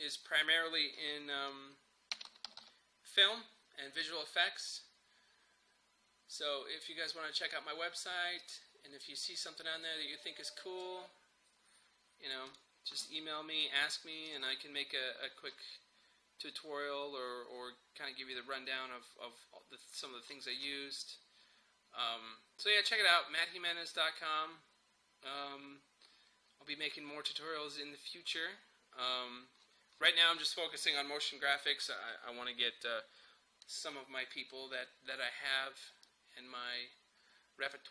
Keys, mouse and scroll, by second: 2.0-3.1 typing, 4.0 click, 8.5-12.5 drag, 8.5 typing, 10.8 typing, 15.4 scroll down 1, 15.4 typing, 19.8-21.7 scroll up 1, 25.9 scroll down 1, 29.6 scroll up 1, 36.1-37.9 drag.